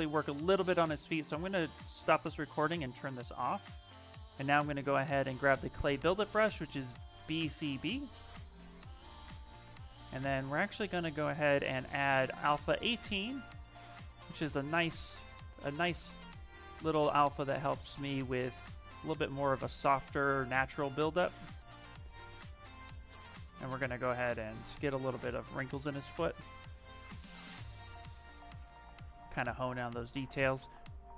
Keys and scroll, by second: 3.1 s, 4.2 b, 5.0 b, 6.6-9.3 typing, 14.7 s.